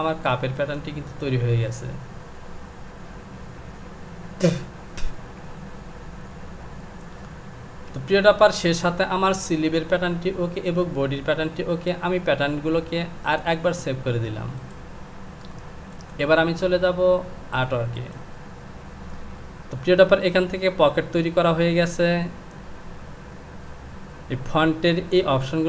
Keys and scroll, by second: 7.9 j.